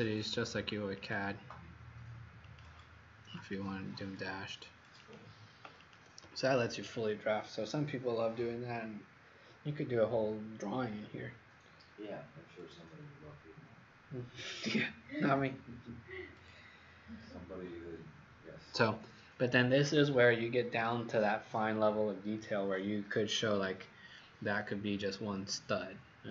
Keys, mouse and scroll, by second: 5.9 click.